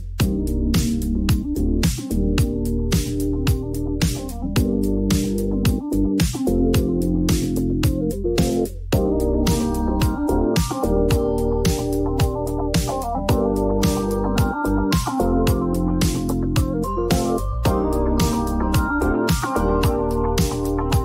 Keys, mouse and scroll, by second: 1.1 r, 2.2 click, 3.3 typing, 4.8 Return, 7.4 click, 8.8 click, 10.0 typing, 10.4 Return, 13.0 click, 13.7 ctrl+d, 15.2 click, 16.7 click, 18.7 click, 20.2 click.